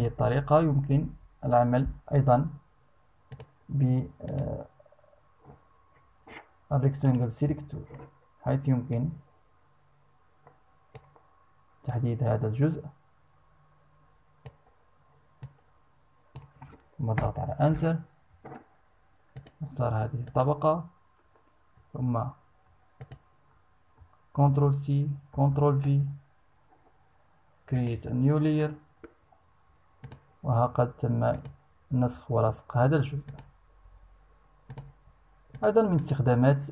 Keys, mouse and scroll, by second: 2.8 click, 3.8 click, 6.6 click, 8.5-10.6 drag, 11.4-14.2 drag, 15.0 click, 16.7 Return, 18.8 click, 19.8 click, 22.5 ctrl+click, 24.0 ctrl+c, 24.9 ctrl+v, 27.3 click, 29.6 click, 30.9 click, 32.8 click, 34.2 click, 35.0 click, 35.5 click.